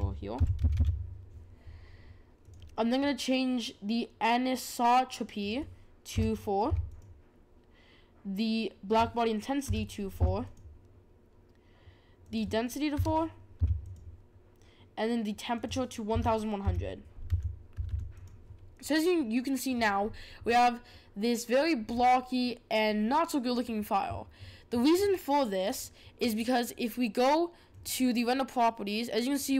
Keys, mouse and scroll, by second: 5.4-7.0 drag, 8.9-10.5 drag, 12.2-13.9 drag, 15.5-17.8 drag, 17.8 0, 21.9-22.8 scroll up 3, 22.8-23.7 scroll down 1, 23.7-24.7 scroll down 1, 27.7 click.